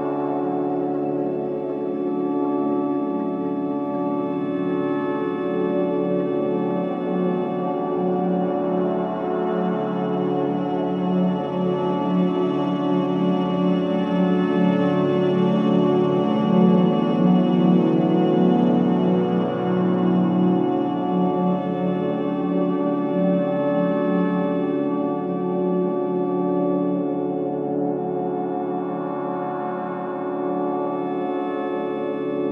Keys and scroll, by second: 0.3 ctrl+z, 3.0 ctrl+z, 5.0 4, 5.6 3, 11.5 4, 22.3 4, 29.6 Delete, 31.0 ctrl+d, 31.1 Escape.